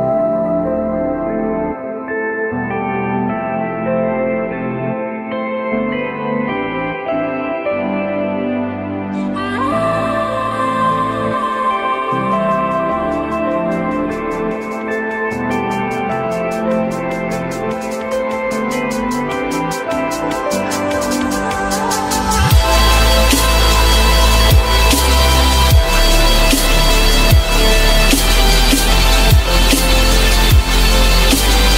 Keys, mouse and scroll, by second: 1.0 click, 7.4-13.6 drag, 12.1 2, 19.9-26.1 drag, 19.9 /, 26.1 /.